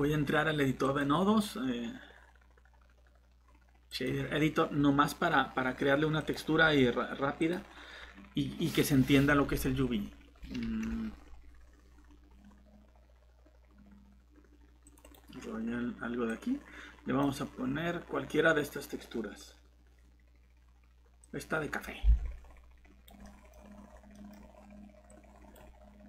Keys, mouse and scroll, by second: 6.6-7.4 scroll down 1, 7.4 click, 10.6 super+e, 12.2 scroll down 1, 14.9 click, 17.9 scroll down 1, 21.2 click, 22.1 alt+Tab, 23.2 middle click, 23.5 scroll up 1, 24.1 middle click, 25.1 click.